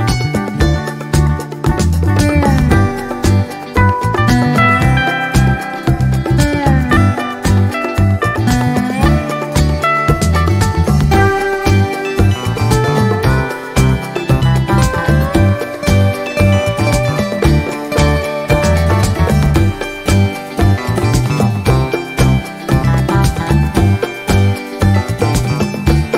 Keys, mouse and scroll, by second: 0.8-1.8 drag, 2.4 click, 3.4 click, 4.2 click, 4.7-5.7 drag, 6.0-7.2 drag, 7.7 click, 8.3 click, 8.7-9.6 scroll up 2, 9.9-12.7 drag, 14.1 ctrl+d, 14.6 ctrl+click, 15.4 ctrl+click, 16.0-17.4 ctrl+drag, 17.7-19.1 drag, 19.2 click, 20.3-22.1 drag, 22.5 click, 23.3-24.9 drag.